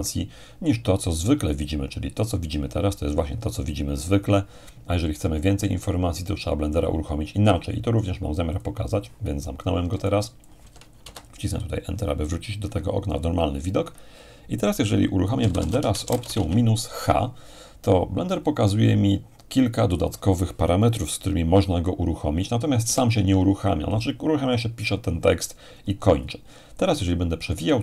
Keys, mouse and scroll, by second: 8.5-9.6 drag, 10.1-11.4 alt+drag, 11.0 alt+Return, 15.2-16.9 typing, 22.8 Return, 24.8-27.8 scroll up 2.